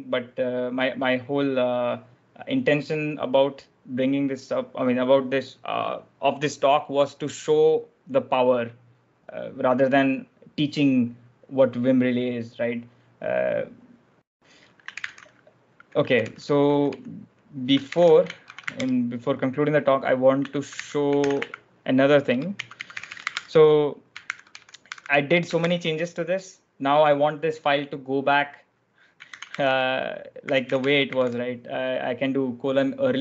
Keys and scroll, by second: 14.8 ctrl+j, 14.8 ctrl+l, 15.6-18.9 typing, 20.3-25.4 typing, 21.2 ctrl+j, 21.2 ctrl+w, 29.2-31.6 typing.